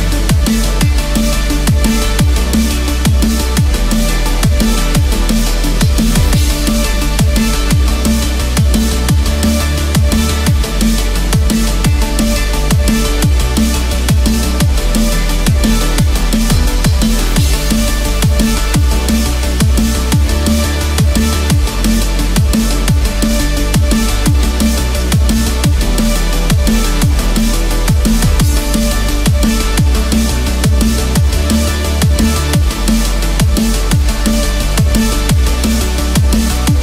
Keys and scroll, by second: 2.8 ctrl+=, 5.3 ctrl+-, 15.1 ctrl+z, 20.1 ctrl+=.